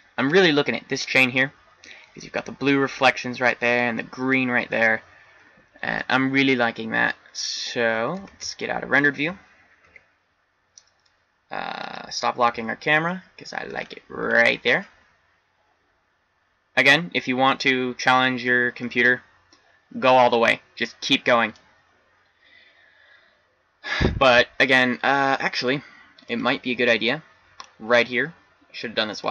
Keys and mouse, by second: 8.5 shift+z, 9.8 n, 12.4 n, 13.1-14.3 middle drag, 16.7-17.4 middle drag.